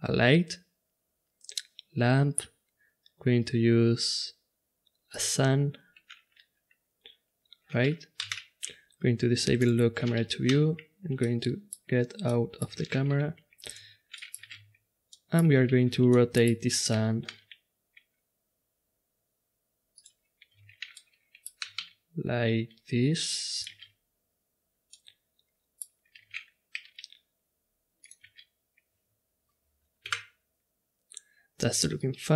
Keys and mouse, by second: 8.3 n, 9.6-11.1 drag, 10.4 n, 11.2 middle drag, 13.1 g, 14.8 shift+z, 17.3 r, 20.6 shift+z, 21.6 r, 24.1 shift+z, 26.3 shift+z, 26.7 r, 28.5 shift+z, 30.0 KP_0, 31.9-32.3 drag.